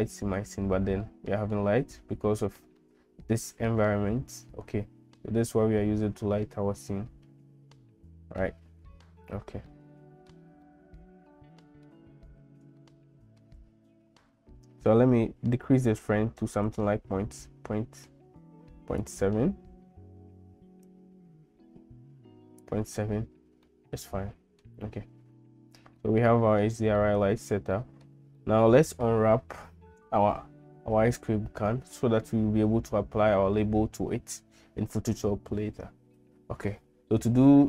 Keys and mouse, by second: 1.1 middle click, 2.8-8.4 middle drag, 9.7 middle click, 10.7-11.9 middle drag, 12.8 shift+middle click, 16.7-19.2 shift+drag, 20.9-22.6 shift+drag, 23.6 middle click, 26.0 shift+middle click, 27.0 middle click, 27.7 shift+middle click, 28.4 middle click.